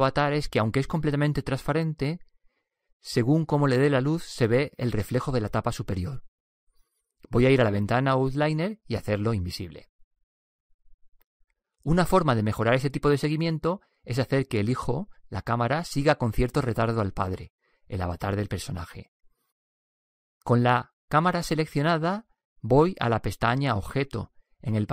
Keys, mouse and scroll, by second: 10.9-12.8 drag, 17.7-20.3 right drag, 22.3-24.1 drag.